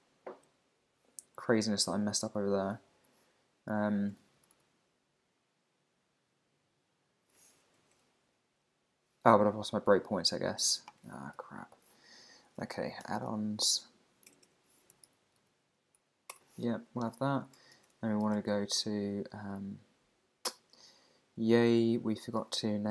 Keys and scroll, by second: 2.9 super+`, 8.7 super+`, 11.3 super+o, 14.3 alt+BackSpace, 14.4 alt+BackSpace, 16.0 Down, 16.3 Return.